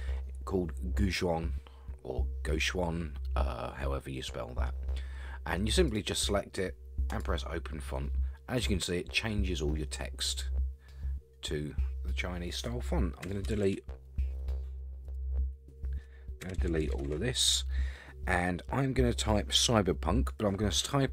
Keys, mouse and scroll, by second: 8.3-10.4 scroll down 2, 13.2 BackSpace, 13.6 BackSpace, 15.1 click, 16.4-17.0 BackSpace.